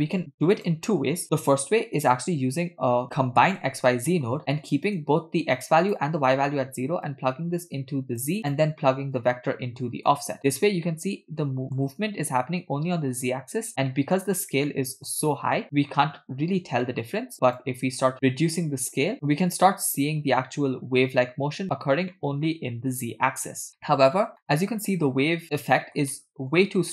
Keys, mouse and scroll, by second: 5.7 click, 7.1-8.8 drag, 9.2-10.3 drag, 11.0-11.8 middle drag, 11.9-12.4 scroll up 2, 13.3-13.8 scroll down 1, 13.8 scroll down 1, 13.9 middle click, 14.8 shift+middle click, 15.9-16.6 scroll up 1, 16.6 scroll up 1, 16.8 middle click, 17.7-19.1 shift+drag, 19.1-20.3 middle drag, 20.4-21.0 scroll down 1, 22.1 middle click, 23.8 middle click, 24.6-26.0 middle drag, 25.4-25.9 scroll down 1, 26.1-26.5 middle drag.